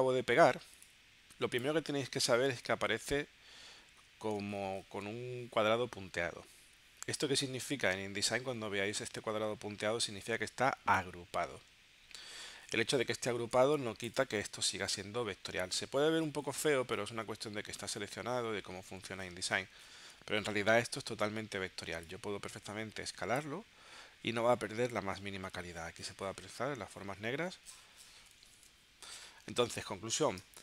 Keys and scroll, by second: 13.7 space, 30.5 space.